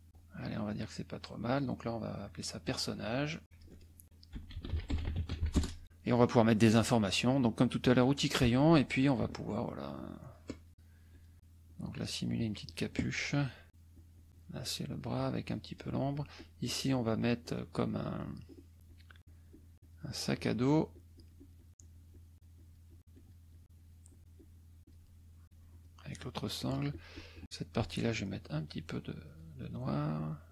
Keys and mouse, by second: 0.5-1.7 drag, 2.3 click, 3.4 click, 4.1-5.9 typing, 7.8 click, 9.0 shift+click, 9.5-10.8 shift+drag, 11.1 shift+click, 11.6 shift+click, 12.2 shift+click, 12.6 shift+click, 13.7-15.9 shift+drag, 16.3 shift+click, 17.4 shift+click, 18.8 shift+click, 19.2-23.0 shift+drag, 23.1 shift+click, 23.5 shift+click, 23.7-25.1 shift+drag, 25.4 shift+click, 26.1-27.6 shift+drag, 27.7-29.5 shift+drag, 29.6 shift+click, 30.1-30.5 shift+drag.